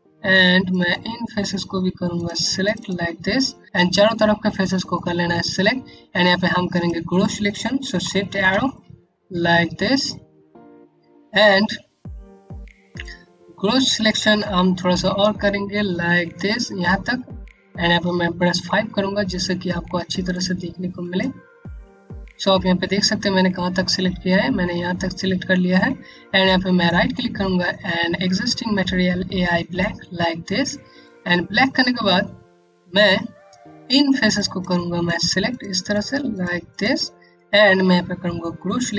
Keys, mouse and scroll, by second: 1.1 scroll up 1, 1.7 shift+click, 2.2 shift+click, 2.8 scroll down 1, 3.2 click, 4.5 scroll up 1, 5.0 click, 8.0-9.7 typing, 10.8 scroll up 1, 11.2 click, 12.9 scroll up 1, 14.5-15.4 typing, 16.5 typing, 17.6-18.4 typing, 19.4-19.7 scroll down 1, 19.8 click, 21.1 scroll down 1, 21.5 alt+click, 26.4 right click, 30.1 scroll down 1, 30.6 alt+click, 31.6 scroll up 1, 33.1 alt+click, 33.8 click, 34.6 shift+click, 35.0 shift+click, 35.4 click, 35.9 shift+click, 36.2 shift+click.